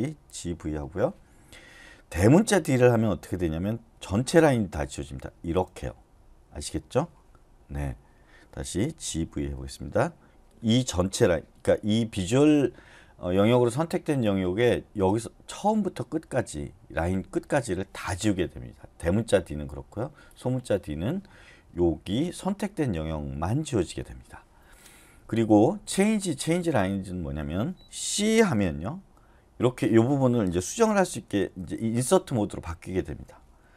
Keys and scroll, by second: 0.0-1.1 typing, 5.4 shift+d, 7.6 u, 9.0-9.4 typing, 28.7-32.6 typing.